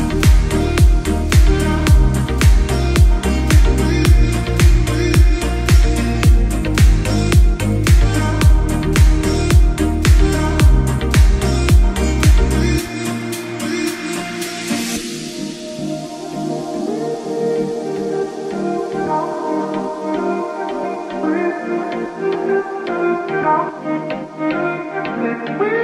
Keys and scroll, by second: 4.7 Escape, 10.5 F2, 12.7 g, 19.9 space, 21.3 F2.